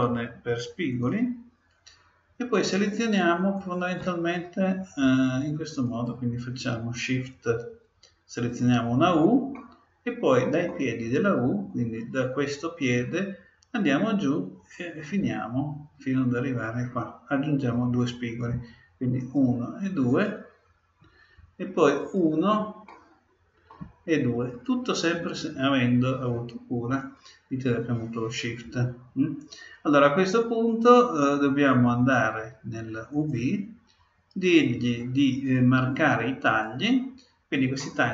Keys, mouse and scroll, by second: 0.9-2.7 drag, 3.5-5.5 right drag, 5.8-7.7 right drag, 8.3-10.1 right drag, 9.5-11.2 middle drag, 19.1-21.9 right drag, 21.9-23.6 right drag, 22.9-24.7 middle drag, 24.5-26.3 right drag, 30.8-32.6 drag, 33.1-34.9 drag, 36.4-38.1 drag, 37.8 middle click.